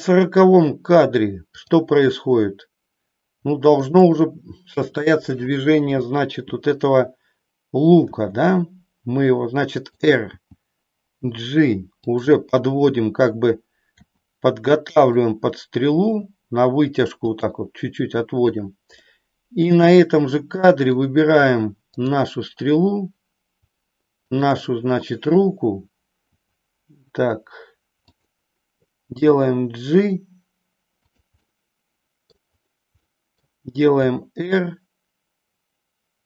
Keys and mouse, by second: 8.1 r, 10.4 g, 13.8 r, 16.0 g, 17.4 click, 19.0 middle click, 20.6 middle click, 22.0-23.0 drag, 24.4-25.4 shift+drag, 26.4 r, 28.2 click, 29.0 g, 31.1 click, 31.5-32.5 middle drag, 33.1 middle click, 34.0 r.